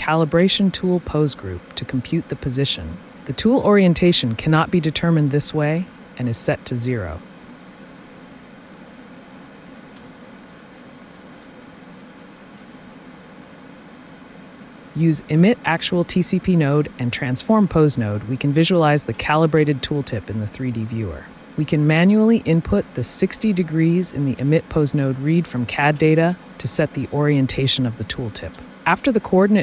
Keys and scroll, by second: 9.8 t, 9.9 space, 15.2 typing, 18.9 ctrl+t, 19.1 space, 24.4 KP_Subtract, 26.6 KP_Enter, 28.5 t.